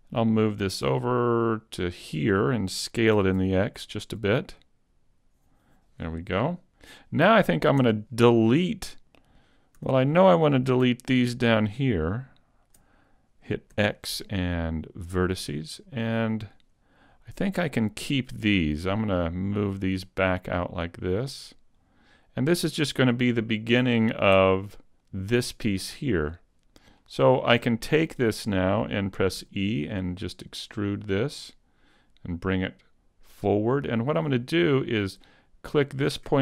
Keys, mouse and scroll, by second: 0.5 click, 3.2 s, 5.7 click, 7.8 Tab, 9.8 a, 11.2 ctrl+click, 13.7 x, 15.3 x, 17.8 right click, 18.9 click, 20.9 right click, 21.8 click, 24.9 alt+right click, 25.9-27.1 scroll up 2, 27.1 shift+middle click, 27.1 scroll up 1, 27.9-29.1 scroll down 1, 29.4 e, 33.4 click, 35.8 right click.